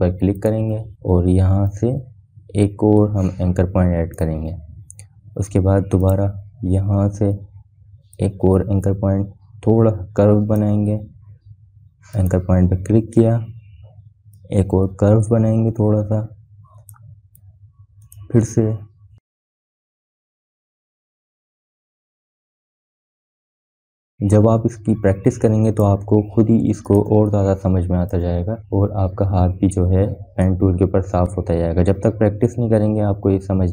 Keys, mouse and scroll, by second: 1.6-28.5 drag, 28.7 space, 28.9 click, 29.2 space, 32.1-33.7 drag.